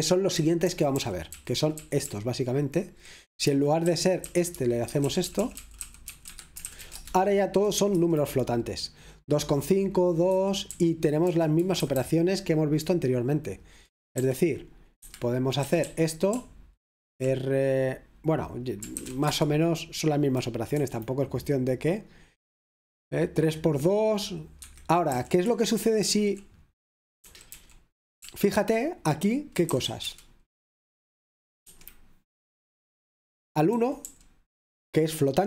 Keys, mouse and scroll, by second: 0.0-0.9 typing, 2.6-7.3 typing, 7.9 F5, 10.4 Escape, 11.0-12.5 typing, 14.2 r, 15.6-17.5 typing, 18.8-19.7 typing, 20.9 F5, 24.6 Escape, 27.2-28.2 typing, 29.7-30.1 typing, 30.1 Return, 31.7 F5, 33.7 typing.